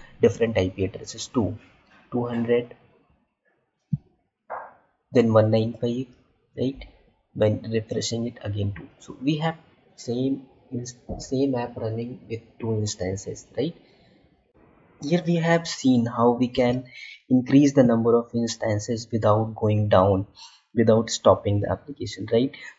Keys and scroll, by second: 17.3 alt+Tab.